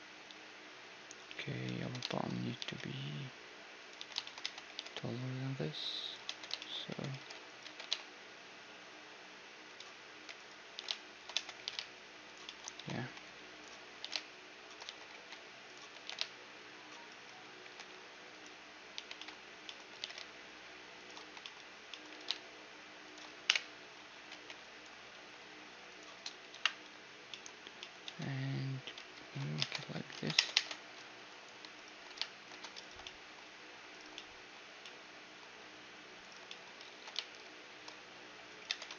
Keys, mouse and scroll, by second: 0.2 z, 0.5 middle click, 1.2-2.7 right drag, 1.5 z, 2.1 Tab, 2.5 g, 4.0 z, 4.4 Tab, 4.7 g, 5.2-6.2 middle drag, 6.2 Tab, 6.6-8.9 middle drag, 6.9 Tab, 7.1 g, 7.6 g, 10.4 g, 10.7 g, 11.4 Tab, 11.6 g, 12.4-14.7 middle drag, 12.7 a, 12.9 c, 13.6-15.4 drag, 14.2-15.9 typing, 15.4 middle click, 17.6 g, 18.9 z, 19.1 c, 19.9 g, 22.0 c, 22.3 g, 23.4-26.5 typing, 23.9-25.9 middle drag, 27.0-31.4 middle drag, 28.0 Tab, 29.1 ctrl+2, 29.6 ctrl+Tab, 30.1 ctrl+Tab, 30.5 ctrl+Tab, 31.7-37.9 right drag, 33.0-34.0 drag, 34.0-38.5 middle drag, 36.9 ctrl+b, 38.7 Tab.